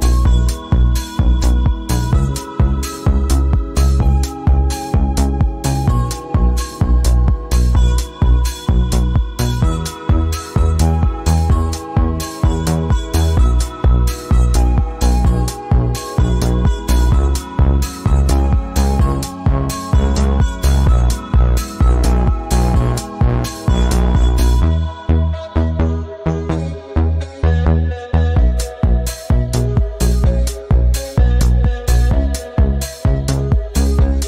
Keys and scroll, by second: 1.3 ctrl+2, 10.2 shift+Right, 10.9 Right, 11.7 shift+Right, 12.7 Right, 19.3 Right, 19.8 shift+Right, 21.6 Left, 32.3 Up, 32.9 Down, 34.1 Left.